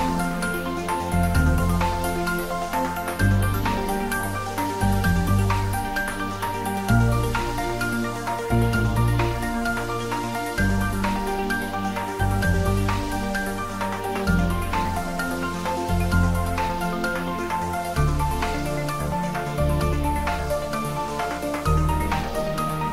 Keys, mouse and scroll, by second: 2.5-3.2 drag, 7.2 shift+d, 8.9 y, 13.1 y, 13.2 click, 16.5 r, 19.9 click, 20.6 g.